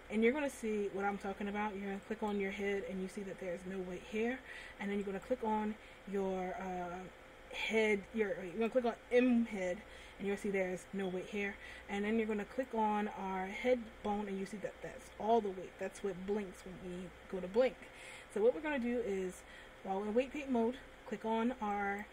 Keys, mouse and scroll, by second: 0.0 middle click, 2.5 right click, 5.6 right click, 8.9 right click, 12.8 right click.